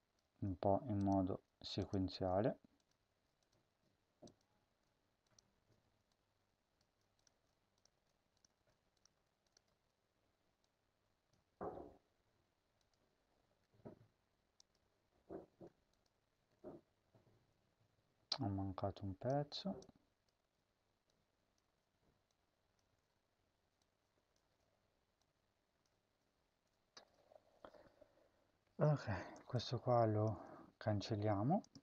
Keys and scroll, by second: 0.2 ctrl+c, 2.2 ctrl+v, 3.0 ctrl+v, 6.8 ctrl+c, 7.4 ctrl+v, 7.8 ctrl+v, 13.4 @, 15.4 @, 19.2 ctrl+c, 20.4 ctrl+v, 21.6 ctrl+v, 27.2 ctrl+s, 30.2 BackSpace.